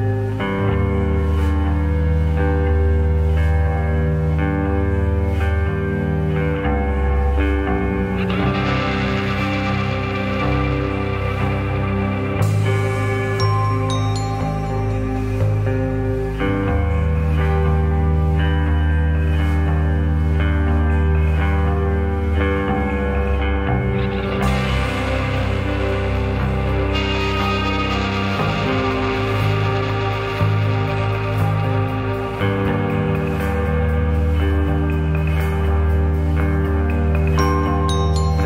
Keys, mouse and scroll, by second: 1.5 click, 2.5 click, 4.4 s, 5.9 click, 9.3-10.3 middle drag, 10.9-11.9 shift+middle drag, 12.3 click, 12.7 click, 14.4 click, 17.2 click, 18.2 click, 19.3-20.7 drag.